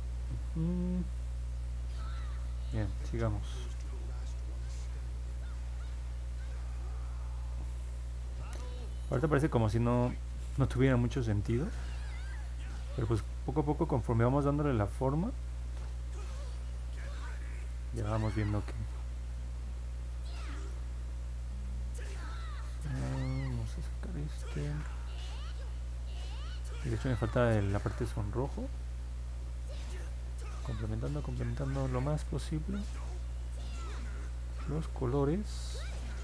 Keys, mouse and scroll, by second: 1.9 middle click, 8.7 click, 9.3 click, 11.2 alt+click, 12.6 click, 13.2 click, 13.5 click, 13.9 click, 14.3 click, 14.9 click, 15.8 click, 16.3 click, 16.6 click, 17.0 click, 17.4 click, 18.5 click, 18.9 click, 19.2 click, 19.5 click, 19.8 click, 20.0 click, 21.3 click, 22.8 click, 24.6 ctrl+z, 25.7 click, 26.4 click, 26.7 click, 27.1 click, 27.5 click, 28.4 click, 28.7 click, 29.1 click, 29.4 click, 29.8 click, 30.2 click, 30.9 click, 31.5 click, 32.0 click, 32.3 click, 32.8 click, 33.2 click, 34.6 click.